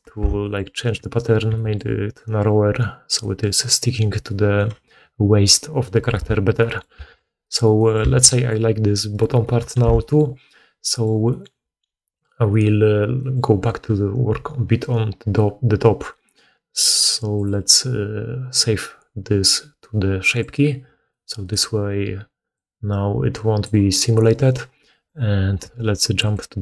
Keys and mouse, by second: 0.9-26.3 drag, 1.4 s, 6.0 1, 7.0 alt+a, 7.4 middle click, 7.4 right click, 8.1 alt+a, 9.1 middle click, 9.1 right click, 9.7 alt+q, 10.9 middle click, 10.9 right click, 21.4-26.6 middle drag, 21.4 right click, 24.0 right click.